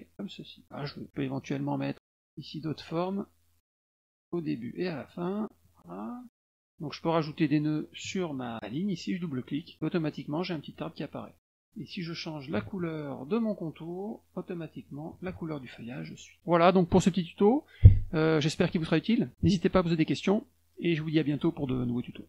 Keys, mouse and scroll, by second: 1.0 click, 1.4 click, 1.8 click, 3.0 click, 3.8 click, 5.0 click, 6.3 click, 6.6 click, 7.3 click, 9.4 click, 9.5 click, 10.5 click, 10.6 click, 11.4 click, 11.7 click, 12.9 click, 14.7 middle click, 15.1 click, 15.9 click.